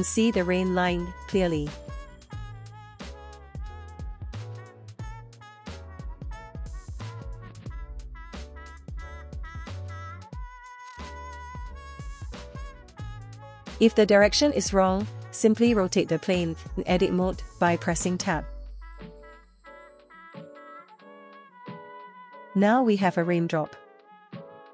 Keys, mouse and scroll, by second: 0.8-1.4 drag, 2.0 click, 4.1 click, 6.5 middle click, 7.3-7.6 scroll up 1, 7.7 shift+middle click, 8.9-9.3 drag, 10.5 click, 10.9 Tab, 11.7 a, 12.7 3, 13.9 r, 19.0 click, 20.7 click, 21.6 Tab, 22.6 space, 23.1 space, 23.7-24.1 scroll up 1, 24.1-24.5 middle drag.